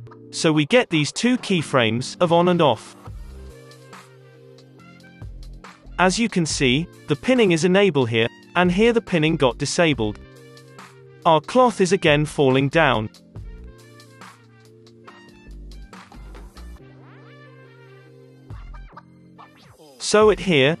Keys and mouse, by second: 0.8 middle click, 2.6 space, 2.9-4.4 drag, 3.7 space, 4.4 middle click, 9.6 space, 9.6-12.0 middle drag, 10.2 space, 11.2 space, 11.3 space, 12.3-15.2 typing, 12.4-14.4 middle drag, 16.6 space, 16.9 click, 17.4 space, 18.7 space, 18.7-20.8 middle drag, 19.7-20.8 drag.